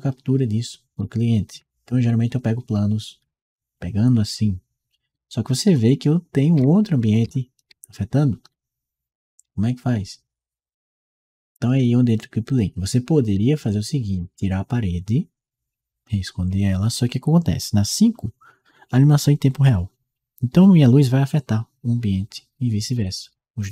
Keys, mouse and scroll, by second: 0.8-11.5 right drag, 2.0 s, 3.0 a, 5.4 w, 8.5 s, 12.3-23.7 right drag, 13.9 d.